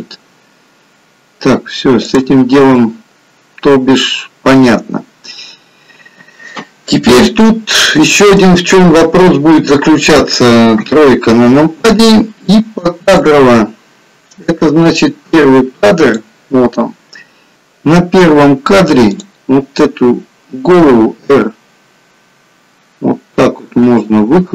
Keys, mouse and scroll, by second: 2.5 click, 2.8 middle click, 8.4 middle click, 10.7 KP_3, 13.4 click, 17.5 click, 19.2 click, 21.0 r.